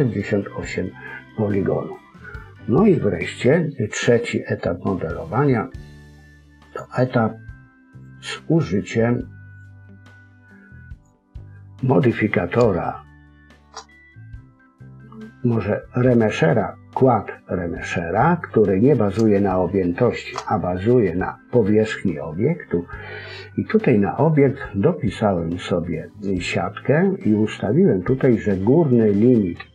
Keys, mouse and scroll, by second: 6.6 click, 7.9 click, 10.9 click, 11.9-12.6 scroll down 3, 12.8 shift+middle click, 12.8-13.4 scroll down 2, 13.8-15.1 scroll up 2, 18.2-18.6 scroll up 2, 18.6-19.2 scroll down 1, 19.4 shift+middle click, 26.2 click.